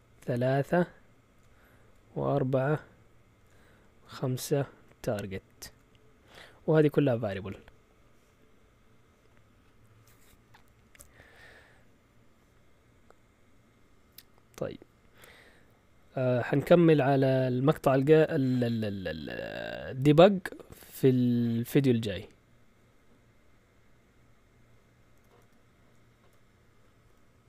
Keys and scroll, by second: 10.8 shift+super+z, 25.1 Escape.